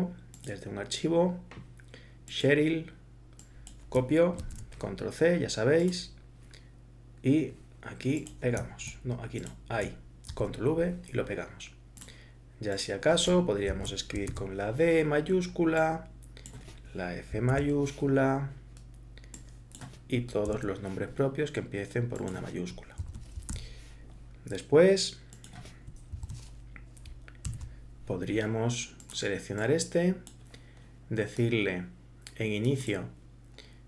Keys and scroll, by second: 4.4 ctrl+c, 10.3 ctrl+v, 13.7 shift+Left, 14.3 shift+d, 17.5 shift+f, 20.5 shift+o, 23.0 shift+Left, 23.6 shift+r, 24.6 r, 26.1 shift+Left, 27.5 shift+s.